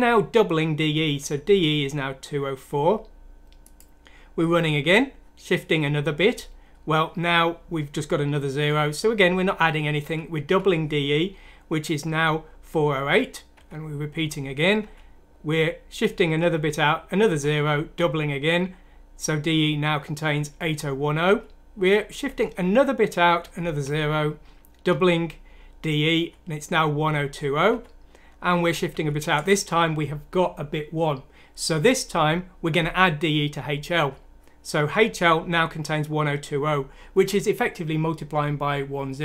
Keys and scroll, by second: 0.8 F7, 6.2 F7, 8.6 F7, 10.5 F7, 13.5 F7, 17.9 F7, 21.2 F7, 23.8 F7, 24.9 F7, 27.7 F7, 32.1 F7.